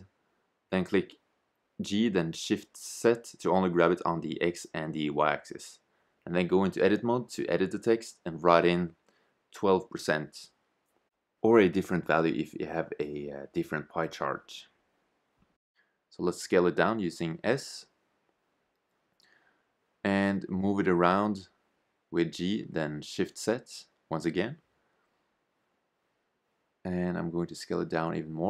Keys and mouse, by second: 3.9 Tab, 4.5-4.8 BackSpace, 5.0 BackSpace, 7.0 1, 7.1 2, 10.7 shift+5, 12.9 Tab, 14.0 shift+z, 16.4 s, 19.8 g, 25.8 r.